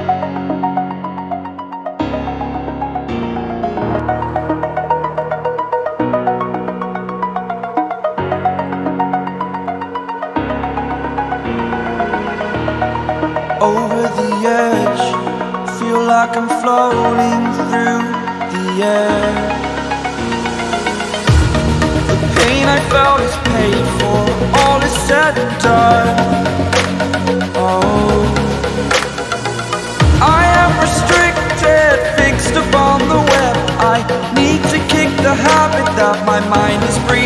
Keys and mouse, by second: 2.1 click, 4.8 click, 8.7 right click, 10.1 ctrl+d, 10.4 click, 11.3 click, 14.3 click, 15.5 click, 17.4 click, 19.0 right click, 19.4 click, 20.1 click, 20.9 click, 21.7 click, 23.0 click, 26.5 click, 27.5 click, 28.7 click, 30.2 click, 32.1 click, 32.5 click.